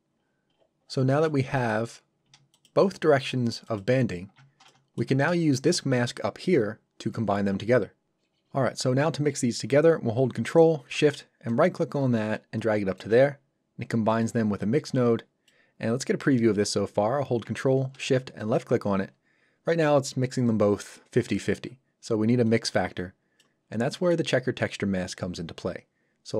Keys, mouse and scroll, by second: 0.2-0.5 scroll down 1, 1.1 middle click, 1.9-2.2 scroll up 1, 2.5 ctrl+shift+click, 4.6 shift+middle click, 5.6 ctrl+shift+click, 11.5 ctrl+shift+right click, 18.4 ctrl+shift+click, 22.5 click, 23.9 middle click.